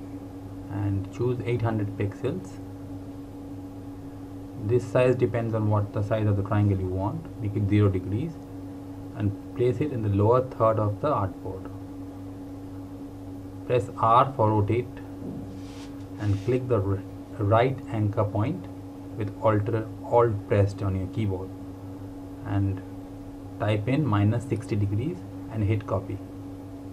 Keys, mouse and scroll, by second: 2.9 KP_8, 3.6 KP_0, 4.5 click, 5.6 KP_0, 6.5 click, 21.3 alt+Num_Lock, 21.5 alt+click, 25.2 KP_Subtract, 26.0 KP_6, 26.7 KP_0.